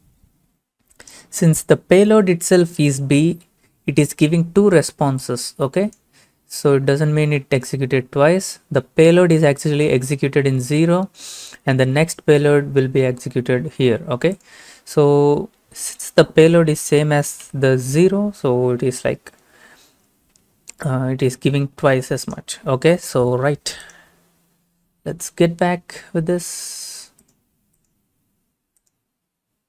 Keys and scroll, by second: 17.4 b.